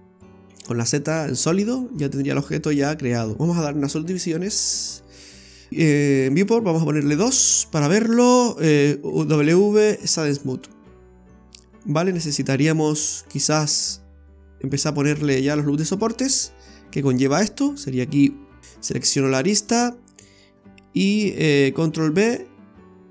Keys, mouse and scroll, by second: 0.5 z, 1.9 scroll down 1, 2.1 middle click, 3.3 scroll up 1, 4.1 click, 4.7 click, 6.3 click, 6.8 scroll up 1, 7.3 middle click, 9.1 w, 10.6 middle click, 11.9 Tab, 12.3 middle click, 15.4 click, 15.9 middle click, 16.7 scroll up 1, 17.1 middle click, 17.6 scroll up 1, 18.6 alt+shift+right click, 18.7 right click, 19.4 scroll down 2, 19.6 middle click, 22.0 ctrl+b.